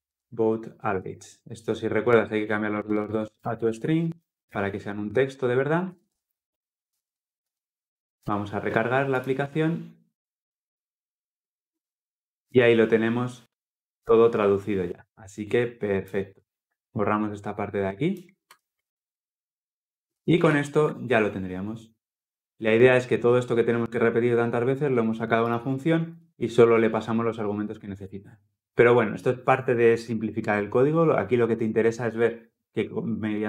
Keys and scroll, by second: 8.9 Return, 9.0 ctrl+F10, 20.2 ctrl+alt+l, 22.9 ctrl+alt+o.